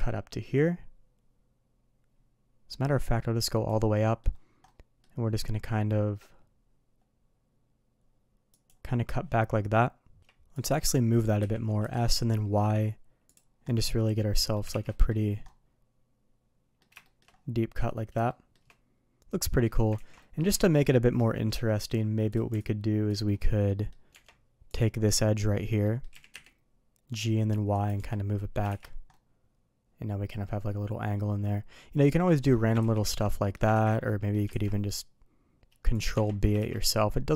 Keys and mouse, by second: 3.9-8.7 middle drag, 10.2 q, 11.4 s, 13.7-14.5 middle drag, 14.7 shift+2, 14.9 middle click, 15.5-16.8 middle drag, 17.0 shift+middle drag, 18.3 shift+middle drag, 18.7-19.6 middle drag, 20.0 ctrl+z, 20.2 middle click, 20.6 middle drag, 21.2 middle click, 23.7 middle click, 24.1 Tab, 24.7 click, 25.4 middle drag, 25.8 middle click, 26.1 g, 28.0 Tab, 28.4 middle click, 28.7 shift+2, 29.1-31.8 middle drag, 32.3 middle click, 32.8 ctrl+z, 33.3 middle drag, 33.8 ctrl+z, 34.0-34.3 middle drag, 34.5 ctrl+b, 36.1 Tab, 36.6 shift+2, 36.8-37.3 middle drag.